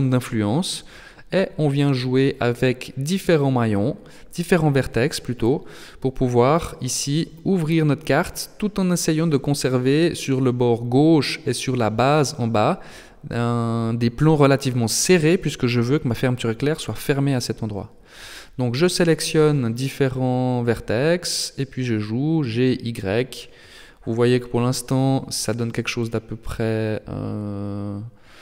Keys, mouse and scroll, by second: 1.9 middle click, 4.0 shift+middle click, 5.0 middle click, 5.8 right click, 6.6 g, 17.2 middle click, 18.4 right click, 18.7 middle click, 20.8 g, 23.0 right click, 23.4 middle click, 24.4 shift+middle click, 25.4 g, 27.8 middle click.